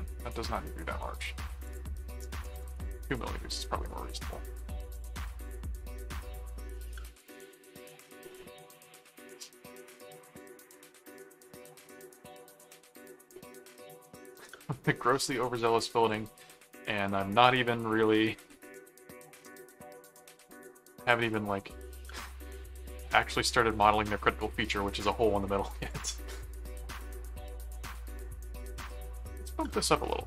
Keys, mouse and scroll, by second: 1.7 click, 3.6 middle click, 4.9 click, 5.2-6.2 middle drag, 6.3 click, 6.4-8.1 typing, 9.3 click, 10.8 right click, 11.8 click, 12.6 middle click, 14.3 right click, 15.2 click, 16.0 click, 18.3 click, 19.5 click, 20.3 click, 21.0 click, 21.3 middle click, 22.5 click, 23.3 click, 25.9 click, 27.7 middle click, 28.6 click, 29.8 click.